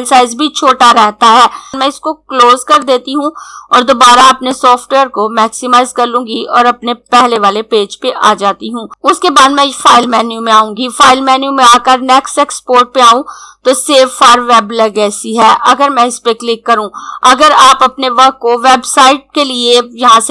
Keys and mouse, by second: 2.7 click, 7.1 click, 9.8 click, 14.9 click.